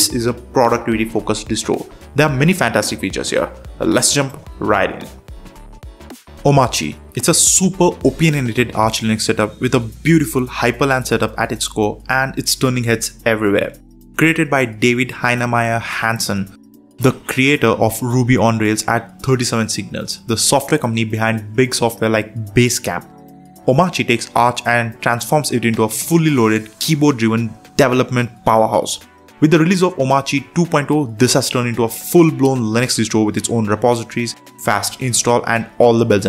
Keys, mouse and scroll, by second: 0.0 Down, 0.4 Down, 0.6 Return, 2.4 super+3, 4.2 super+4, 4.7 super+space.